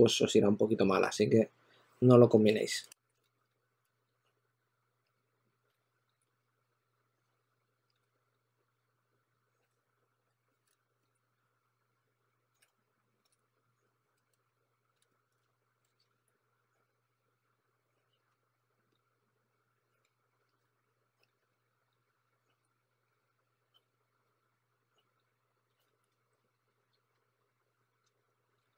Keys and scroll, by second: 4.5-7.2 typing, 9.6-10.6 typing, 12.2 s, 12.5 2, 17.7 s, 18.1 2, 19.7-21.6 typing, 22.7 s, 23.7 d, 25.4-28.7 typing.